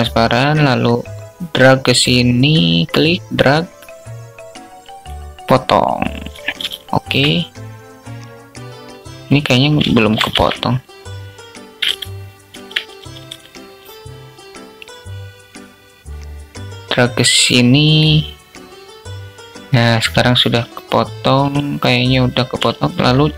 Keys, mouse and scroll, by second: 2.0-4.5 drag, 6.2 alt+shift+click, 9.3 shift+click, 9.6 ctrl+z, 11.2 alt+z, 12.3 a, 12.6 a, 15.5-17.4 drag, 22.8 c.